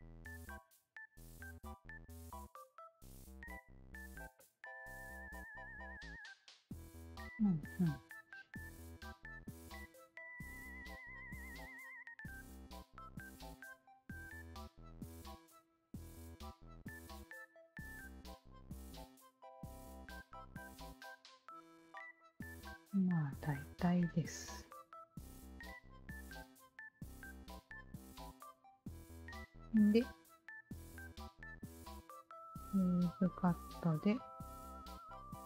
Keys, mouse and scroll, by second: 0.8 e, 1.0 r, 1.9 shift+click, 3.1 shift+click, 4.3 shift+click, 4.7 shift+click, 5.7 ctrl+s, 6.1-9.2 shift+drag, 9.7 alt+click, 10.9 r, 11.8-13.2 alt+drag, 13.5-15.0 alt+drag, 15.4 alt+click, 15.8 alt+click, 18.1 alt+click, 19.0 alt+click, 20.3 w, 20.5 alt+click, 21.1 alt+click, 22.1 alt+click, 22.8-23.9 alt+drag, 24.4 alt+click, 25.5 alt+click, 26.6 alt+click, 28.9 alt+click, 29.5-31.2 alt+drag, 31.9 shift+q, 32.7 alt+click, 33.7-35.1 alt+drag.